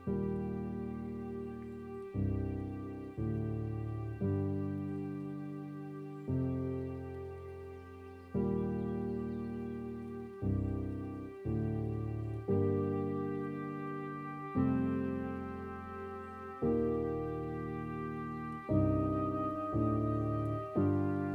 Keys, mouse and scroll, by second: 0.4-3.4 drag, 3.4-5.0 scroll up 1, 5.0 g, 8.0 r, 12.0 scroll down 2, 12.3 middle click, 12.9 scroll down 4, 14.0 click, 16.2 scroll up 2, 17.4-17.8 scroll down 2, 17.8-21.3 middle drag.